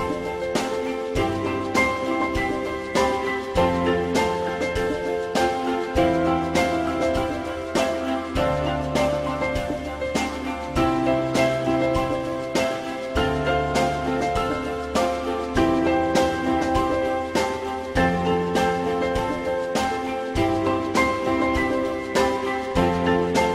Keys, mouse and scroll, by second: 8.4 2, 10.8 shift+click, 11.9 ctrl+shift+e.